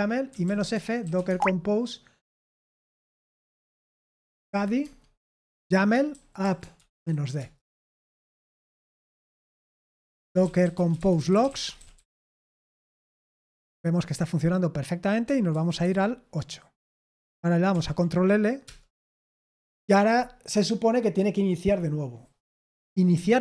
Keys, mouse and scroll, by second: 0.0-1.6 typing, 4.1-7.4 typing, 9.5 Return, 9.8-14.0 typing, 15.5 super+7, 15.8 super+8, 17.7 ctrl+l, 18.6 Return.